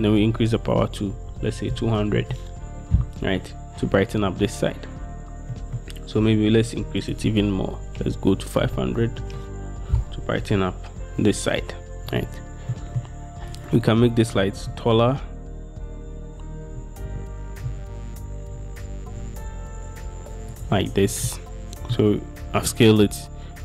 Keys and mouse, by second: 5.7 middle click, 8.9 middle click, 8.9 0, 9.3 Return, 14.7 s, 14.8 middle click, 16.9 z, 17.2 z, 17.8 z, 19.2 y, 19.5 y, 21.4-22.1 middle drag.